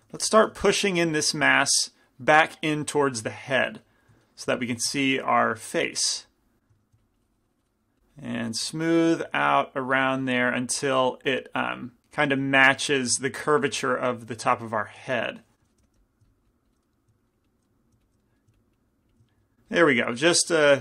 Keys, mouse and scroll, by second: 0.3 f, 1.1 f, 1.7-3.8 drag, 5.2-14.6 drag, 5.2-7.8 middle drag, 5.2 f, 8.8-10.6 middle drag, 13.1-14.6 middle drag, 13.1 z, 14.6 z, 15.7 i, 15.9 f, 16.0 click, 19.1 click, 20.3-20.8 drag, 20.3-20.8 middle drag.